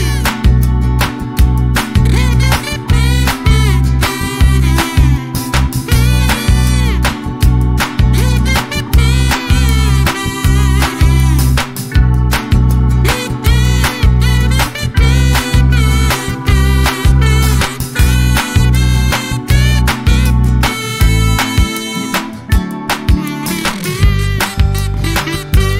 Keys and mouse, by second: 0.0-0.9 typing, 2.1 space, 4.1 click, 5.3 click, 6.7 F12, 7.4 space, 7.7 =, 8.7 click, 9.3 click, 11.6 click, 12.7 click, 13.5 click, 14.2 space, 15.1 -, 16.5 click, 17.8 click, 18.9 ctrl+shift+click, 21.5 space, 21.8 -, 22.7 space, 24.0 space.